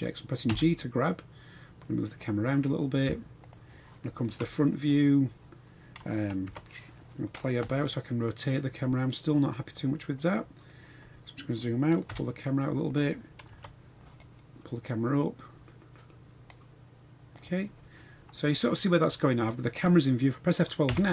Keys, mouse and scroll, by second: 0.5 g, 4.2 KP_1, 6.4 KP_7, 7.6 r, 10.2 middle click, 11.1 scroll down 2, 12.1 g, 13.4 KP_3, 14.8-17.3 drag, 20.4 scroll down 1.